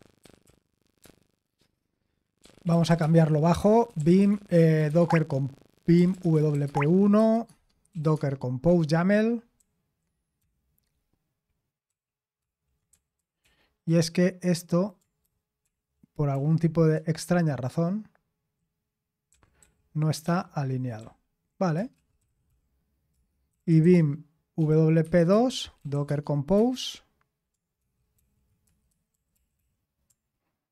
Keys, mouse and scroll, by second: 0.0-0.9 typing, 2.4-10.1 typing, 11.9-15.7 typing, 17.7 ctrl+l, 19.0-21.0 typing, 22.0-26.5 typing, 27.8-28.7 typing, 30.5-30.7 typing.